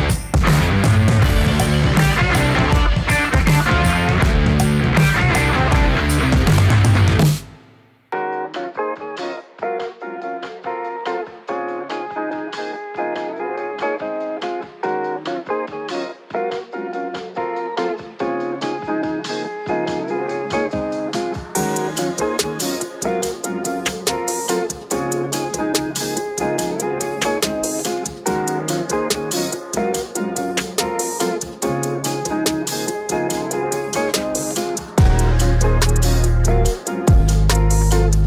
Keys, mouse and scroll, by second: 0.0 Return, 0.9 ctrl+z, 1.4 ctrl+space, 2.2-3.8 typing, 3.5 Down, 6.4 click, 7.3-8.7 typing, 9.8-10.5 typing, 9.9-14.5 drag, 12.9-13.6 typing, 15.0-16.0 typing, 17.3 click, 17.6-20.0 typing, 20.1 click, 21.8 typing, 22.0 ctrl+d, 23.1 scroll up 1, 23.9 click, 27.0-29.3 typing, 30.3 click, 32.9 click, 33.4 click, 35.0 ctrl+space, 35.4-38.2 typing.